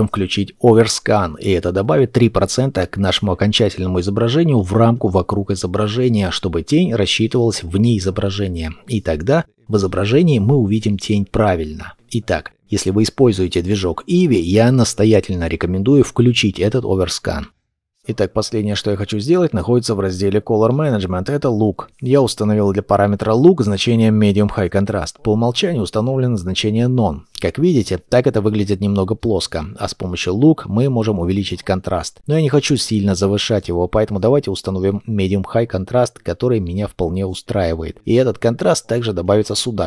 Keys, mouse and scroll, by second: 17.1 shift+middle click, 20.3-21.7 scroll down 1, 38.5 middle click.